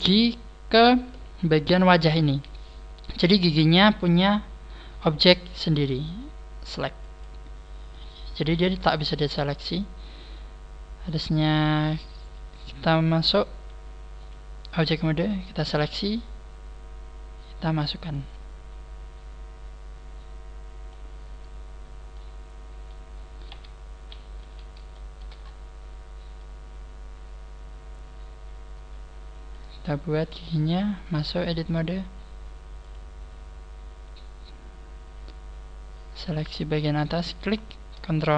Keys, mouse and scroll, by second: 11.6 click, 14.7 click, 15.6 right click, 18.0 click, 22.0 middle click, 23.4 KP_3, 23.8-24.3 scroll down 2, 24.4 z, 24.8 shift+middle click, 25.4 scroll up 4, 25.5 KP_3, 26.3 shift+middle click, 26.3 click, 26.3 scroll up 1, 32.8 click, 33.4 scroll up 2, 37.2 right click.